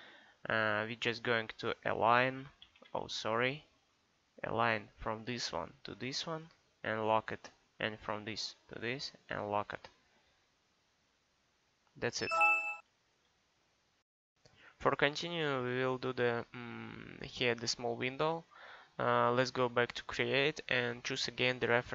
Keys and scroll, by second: 2.8 Escape, 13.4 Escape.